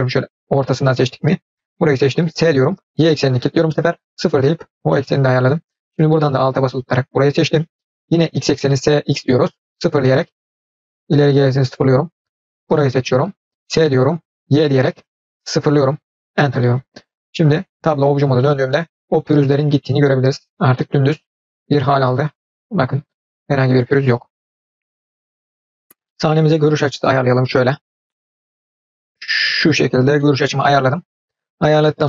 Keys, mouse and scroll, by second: 2.4 s, 4.9 middle click, 6.4 alt+click, 8.8 s, 10.6-11.7 middle drag, 12.6 alt+click, 13.7 s, 17.8 Tab, 18.1 click, 18.4-24.6 middle drag, 26.6 scroll down 1, 26.9-27.6 middle drag, 27.8 scroll up 1, 28.1-28.7 shift+middle drag, 28.8-30.0 middle drag, 30.2-31.1 shift+middle drag.